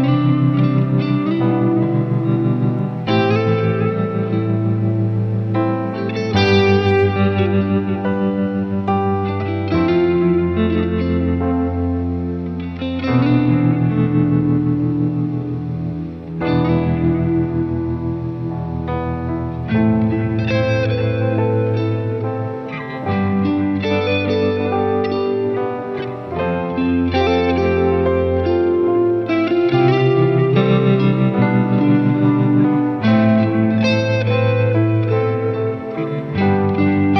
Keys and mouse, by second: 1.7 ctrl+z, 2.0 right click, 2.9 ctrl+z, 5.0 ctrl+z, 10.2 right click, 10.5 ctrl+z, 10.9 ctrl+z, 11.0 right click, 11.7 ctrl+z, 12.5 ctrl+z, 13.1 ctrl+z, 13.5 ctrl+z, 14.0 ctrl+z, 14.5 ctrl+z, 14.7 ctrl+z, 16.7 ctrl+z, 16.9 right click, 18.6 ctrl+z, 18.9 ctrl+z, 20.3 ctrl+z, 20.6 ctrl+z, 20.9 right click, 28.4 ctrl+z, 29.5 ctrl+z, 29.8 ctrl+z, 32.1 ctrl+z, 32.1 right click, 32.3 ctrl+z, 32.7 ctrl+z, 32.9 ctrl+z, 33.1 ctrl+z, 33.3 ctrl+z, 33.7 ctrl+z, 34.3 ctrl+z, 34.6 ctrl+z, 34.8 ctrl+z, 35.9 ctrl+z, 36.8 ctrl+z.